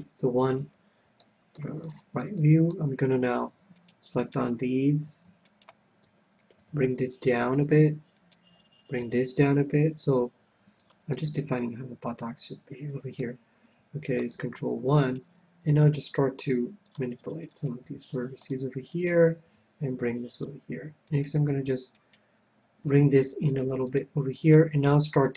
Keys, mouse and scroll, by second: 0.2 KP_1, 0.8 ctrl+KP_1, 1.4-4.4 middle drag, 3.4-7.7 right drag, 6.9 g, 8.0-9.8 drag, 8.4-10.5 right drag, 9.3 g, 11.2-12.9 drag, 11.4-13.0 middle drag, 15.3-17.1 right drag, 16.1 g, 17.3-20.3 drag, 17.8-21.2 right drag, 18.1 g, 19.8 g, 20.7-22.4 drag, 21.8 g, 22.3-24.2 right drag, 23.1 g, 24.2-25.3 drag, 24.7-25.3 right drag, 25.0 g.